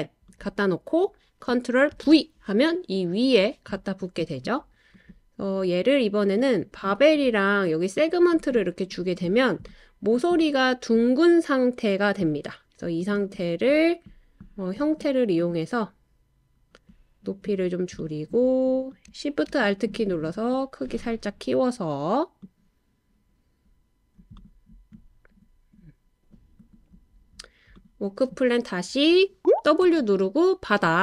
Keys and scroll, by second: 1.9 super+v, 29.8 w.